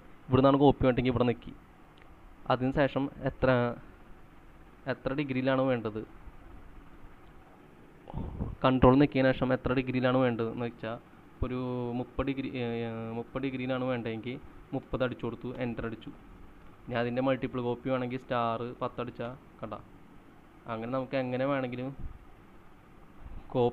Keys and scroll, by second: 14.4-15.4 typing, 15.6 Return, 17.6-20.5 typing, 21.6-23.4 typing.